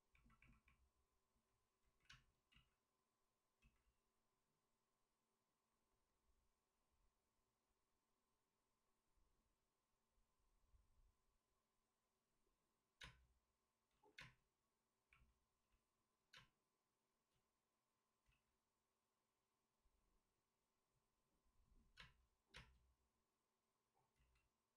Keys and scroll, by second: 1.8 ctrl+z, 2.0 space, 2.5 ctrl+z, 3.6 ctrl+z, 12.9 space, 13.8 ctrl+z, 14.1 space, 15.6 ctrl+z, 18.2 ctrl+z, 18.2 space, 21.9 space, 22.9 space, 24.1 ctrl+z.